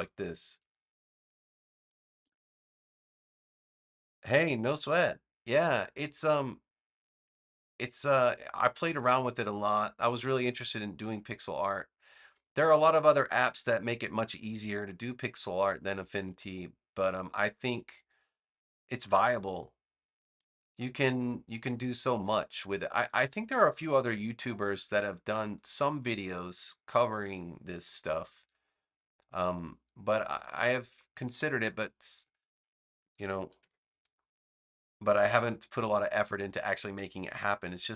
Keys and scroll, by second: 10.8 a, 23.9 =, 26.8 BackSpace, 33.5 v.